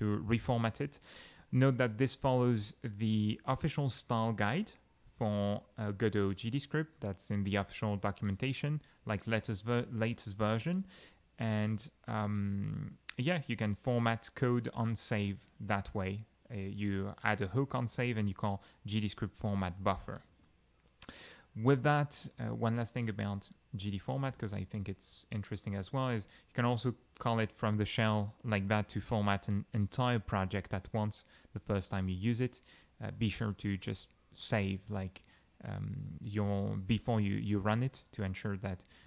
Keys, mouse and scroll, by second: 10.4 g, 16.8 alt+x, 17.6 Down, 17.9 Up, 20.3 Escape, 23.1 alt+Caps_Lock, 23.2 alt+t, 24.2 Caps_Lock, 24.3 Up, 25.6-26.5 typing, 27.0 Right, 37.6 ctrl+shift+q.